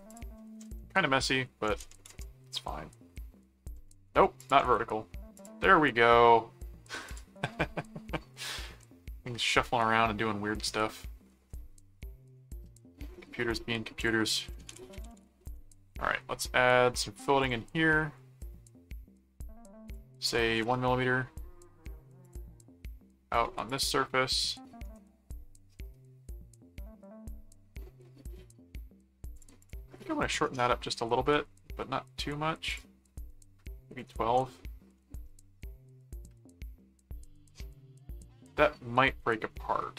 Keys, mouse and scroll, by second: 0.1 click, 4.4 alt+click, 4.6 alt+v, 5.3 click, 7.1 click, 8.8 middle click, 9.6 middle click, 10.7 middle click, 11.5 middle click, 12.4 middle click, 13.1 middle click, 13.9 click, 14.1-15.7 typing, 17.4 click, 19.9 click, 22.2 click, 23.7 click, 24.8 right click, 25.6-29.0 middle drag, 29.3 click, 30.0-31.1 middle drag, 31.2 middle click, 32.7 click, 35.0-36.4 middle drag, 36.8-39.4 middle drag.